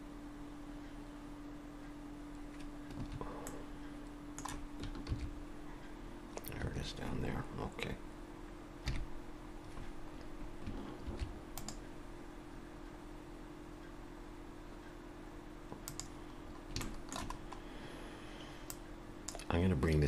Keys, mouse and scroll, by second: 3.5 middle click, 5.1 ctrl+r, 8.9 KP_3, 10.2-10.7 scroll down 2, 11.1 ctrl+r, 16.4-16.8 scroll up 2, 16.8 shift+middle click, 17.3-18.7 scroll up 2, 18.7 click, 18.7-19.2 scroll up 1.